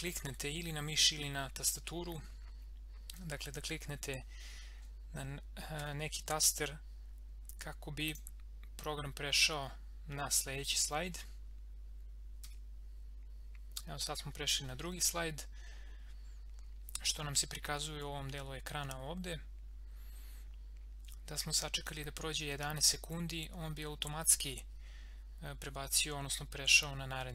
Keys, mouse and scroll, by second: 5.8 F6, 8.1 click, 12.4 Right.